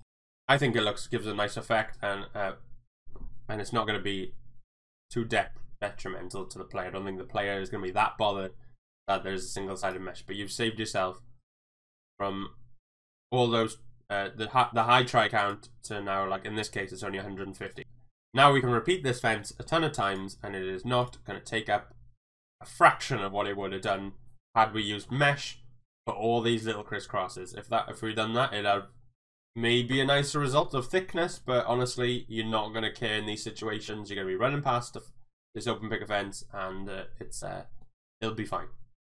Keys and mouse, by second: 11.5 click, 15.1 click, 15.8 Tab, 17.3 Tab, 19.4-19.9 middle drag, 21.0 click, 21.3-24.3 middle drag, 25.1-27.4 shift+middle drag, 32.6-33.0 middle drag, 33.3-38.6 middle drag.